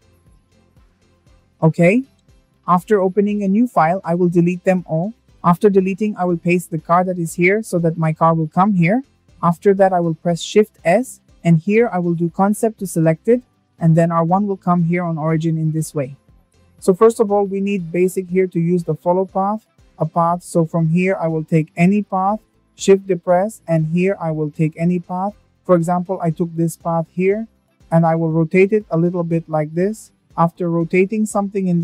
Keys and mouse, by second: 2.4 Delete, 4.6 ctrl+v, 7.6 shift+middle drag, 8.8 shift+s, 15.7 `, 17.3 shift+a, 20.2 shift+a, 25.5 click.